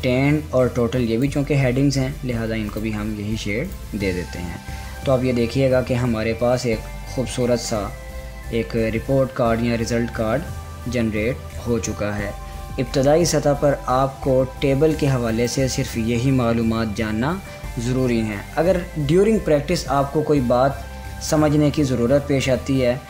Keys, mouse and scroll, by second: 5.6 scroll down 1, 6.7 scroll up 1, 7.7 scroll down 1, 8.5-9.2 scroll up 1, 9.2 scroll, 9.3-10.6 scroll down 1, 10.7-11.1 scroll up 1, 11.4 scroll up 1, 15.9 click.